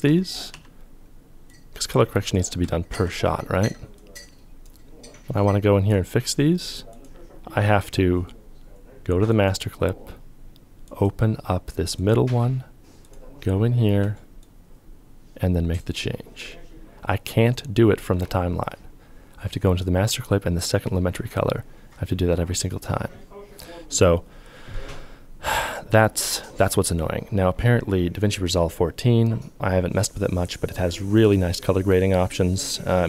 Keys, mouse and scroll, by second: 0.0 f, 2.4 ctrl+f, 14.0 ctrl+click.